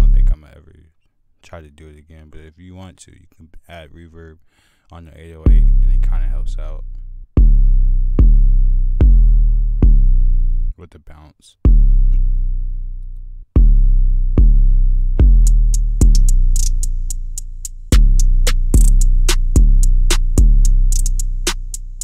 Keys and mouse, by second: 0.8-1.8 drag, 3.1-4.1 drag, 4.1 F1, 4.1 click, 6.3 drag, 6.9 drag, 7.6 drag, 7.9-8.9 drag, 8.9 F1, 12.0 click, 13.5 F1, 13.5 click, 14.6 click, 15.1 click, 15.9-17.2 drag, 18.3 click, 18.6-19.2 drag, 19.3 drag, 20.2 click.